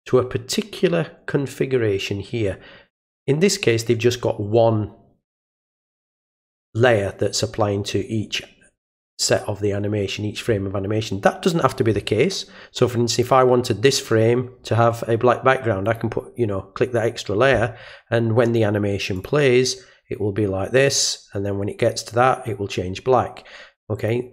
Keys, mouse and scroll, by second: 13.1 click, 15.9 click, 19.2 click, 24.0 click.